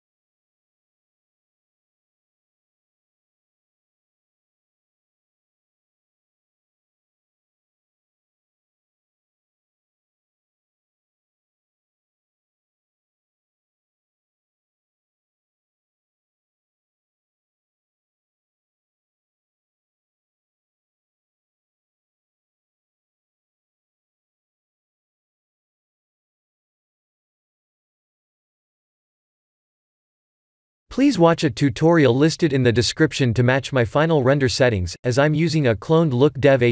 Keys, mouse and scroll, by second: 1.4 click, 2.5-3.8 scroll up 2, 3.8 click, 5.0 shift+click, 6.2 scroll up 3, 6.7 shift+middle click, 6.9 shift+middle click, 7.6 click, 8.6 click, 10.7 shift+click, 11.4 shift+click, 11.7 click, 13.0 click, 13.2 shift+click, 13.7 shift+click, 14.4 click, 15.4 click, 16.9 shift+click, 18.0 ctrl+j, 19.6 click, 24.8 click, 26.8 click, 27.3-28.6 scroll down 4, 28.6 KP_0, 29.4 KP_0, 31.2 click, 34.4-36.3 scroll down 13, 36.6 click.